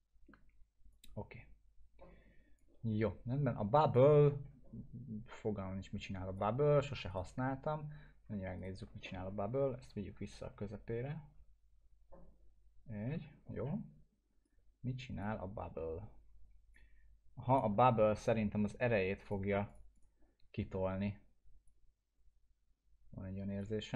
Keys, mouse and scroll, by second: 0.9-2.8 drag, 7.1 right click, 9.0 middle click, 9.3 scroll down 1, 9.9 ctrl+z, 14.4-15.4 drag, 18.0 ctrl+z, 18.4 scroll up 2, 18.8 alt+middle click, 19.2-23.9 drag, 21.9-23.8 drag.